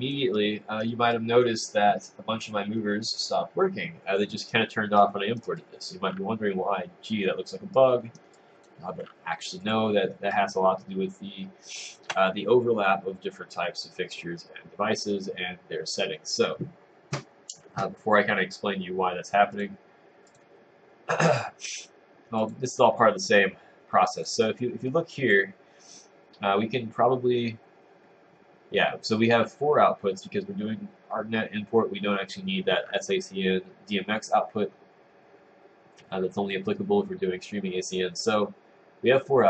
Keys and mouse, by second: 0.4 right click, 1.2 click, 5.0 right click, 5.6 click, 7.8 right click, 8.4 click, 9.7 click, 10.4 click, 19.8 click, 20.4 click, 22.6 click, 24.3 click, 25.3 click.